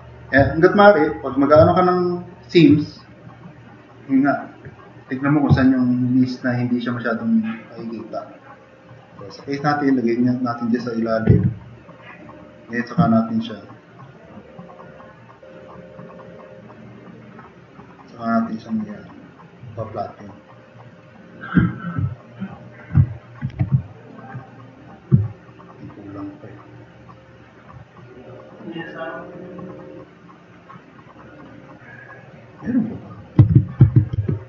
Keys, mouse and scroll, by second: 2.0 click, 3.3 drag, 4.2 drag, 7.6 drag, 9.6-10.0 drag, 14.8 click, 23.5 2, 25.4 drag, 25.7-26.5 drag, 30.1-31.6 drag, 32.2 click, 32.9 click, 33.4 alt+q, 33.8 alt+q, 34.2 alt+q.